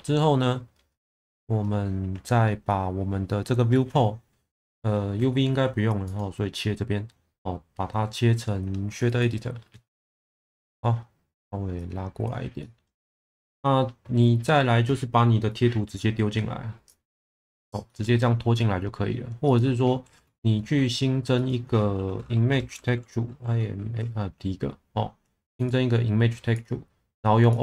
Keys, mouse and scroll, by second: 6.1-9.2 drag, 10.0-10.4 middle drag, 11.8-16.9 drag, 17.1-17.4 drag, 17.9-18.2 middle drag.